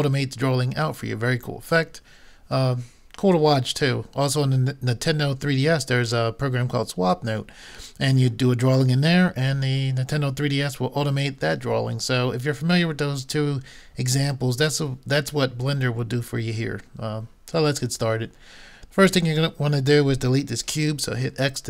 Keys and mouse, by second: 21.3 x.